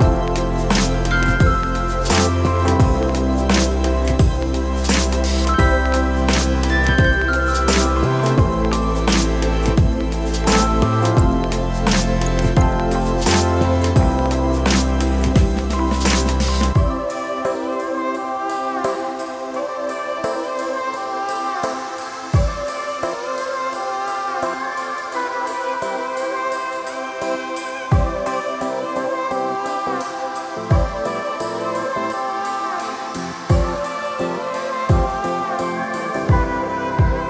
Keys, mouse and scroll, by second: 1.3 alt+click, 2.3 ctrl+middle click, 3.3-4.8 drag, 6.1 g, 9.2 middle click, 10.8-11.9 drag, 13.0 e, 15.5 middle click, 16.7 ctrl+r, 18.2 shift+click, 19.5 alt+shift+click, 20.5 x, 21.8 Tab, 22.3 ctrl+a, 23.2 Tab, 24.0 click, 25.1 ctrl+b, 30.3 middle click, 31.3 click, 32.0 ctrl+b, 36.1 shift+z, 36.8 click.